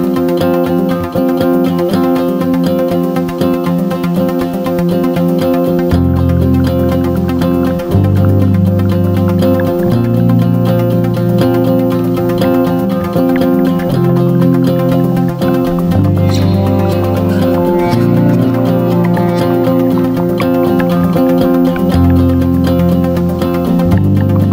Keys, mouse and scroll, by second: 0.8-15.0 ctrl+shift+drag, 15.5 ctrl+d, 15.8-24.5 drag, 20.2 shift+9.